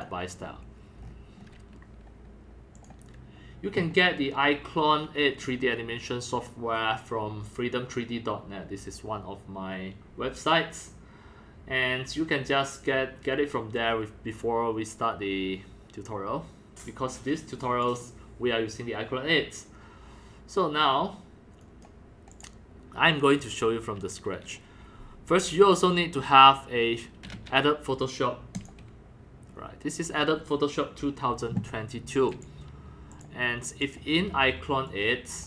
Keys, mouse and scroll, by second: 0.0-1.0 drag, 1.0-1.4 scroll down 4, 1.4 scroll up 3, 1.8 scroll, 2.8 click, 3.6 click, 4.0-4.8 scroll up 2, 4.8 scroll down 1, 4.8 scroll, 5.4 scroll down 1, 5.5 scroll, 5.5-6.5 scroll down 3, 6.5 scroll up 2, 6.7 scroll down 1, 14.4-18.3 drag, 18.6-21.4 drag, 21.6 click, 22.3 click, 23.0-25.2 drag, 25.3 click, 27.2-32.1 drag, 32.3 click, 33.2 click, 33.8 click, 34.9 click.